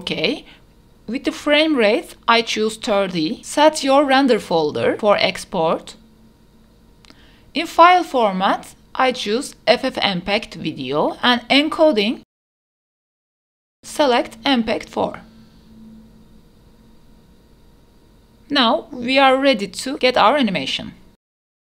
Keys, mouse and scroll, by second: 1.5-2.3 scroll down 3, 3.2-4.1 scroll down 1, 4.1 click, 9.0-10.7 drag, 11.1-12.0 scroll down 2, 12.7 click, 12.9 click, 13.2-14.8 scroll down 4, 14.8-16.4 drag, 19.4 click, 21.0-21.7 drag.